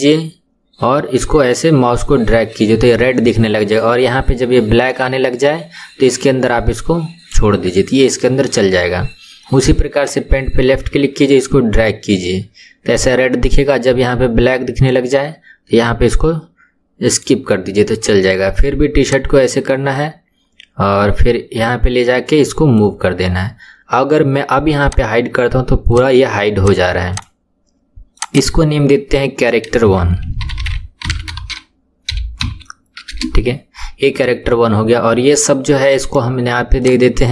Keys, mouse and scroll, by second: 10.0 click, 19.1 click, 24.8 click, 25.9 click, 26.6 click, 27.1 click, 28.2 click, 28.3-31.5 drag, 36.0-37.3 right drag.